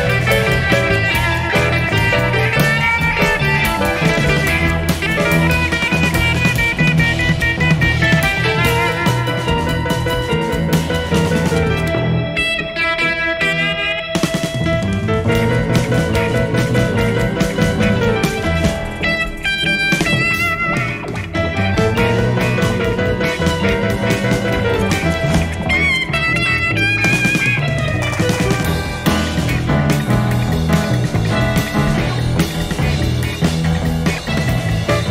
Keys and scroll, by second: 2.9 Page_Down, 4.3 Page_Up, 5.7 ctrl+d, 8.1 Page_Down, 9.8 Page_Up, 10.8 space, 11.8 ctrl++, 17.9 F1, 20.1 typing, 21.0 shift+F6, 22.3 F1, 22.8 ctrl+d, 23.7 -, 34.2 Page_Down, 34.6 Page_Up.